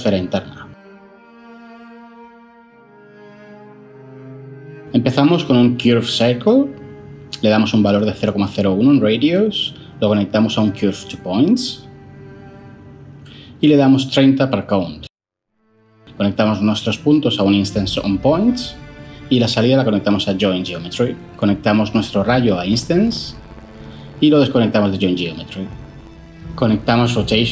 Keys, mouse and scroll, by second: 3.1 ctrl+shift+a, 3.9-5.2 typing, 5.6 Return, 6.3 typing, 8.5-9.1 typing, 11.0-12.5 typing, 12.8 Down, 12.9 Return, 14.7 typing, 15.2 Return, 17.1-17.9 typing, 18.1 Return, 19.4 ctrl+z, 27.4-27.5 typing.